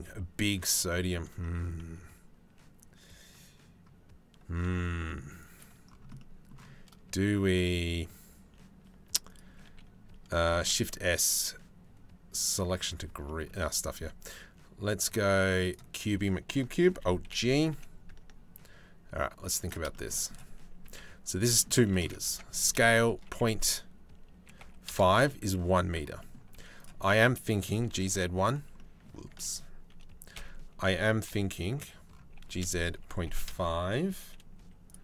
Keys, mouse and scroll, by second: 0.5 shift+middle click, 1.0-5.1 middle drag, 5.1 click, 5.7 click, 8.8 shift+click, 9.2 shift+a, 10.1 shift+s, 13.2 shift+a, 16.5 alt+g, 16.8 KP_7, 17.3 g, 20.4 KP_Decimal, 21.8 Tab, 22.2 s, 25.1 click, 25.8 click, 26.1 3, 27.3 g, 28.9 ctrl+z, 29.9 KP_Decimal, 30.9 KP_3, 31.9 g, 34.1 z, 34.7 click.